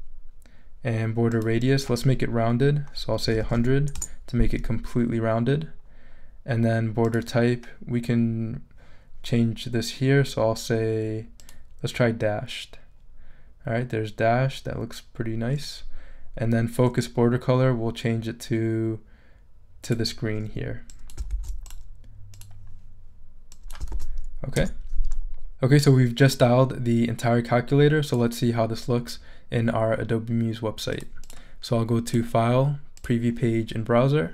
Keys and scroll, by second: 3.0-3.9 typing, 3.9 Return, 21.3 super+c, 23.9 super+v, 24.6 super+Return.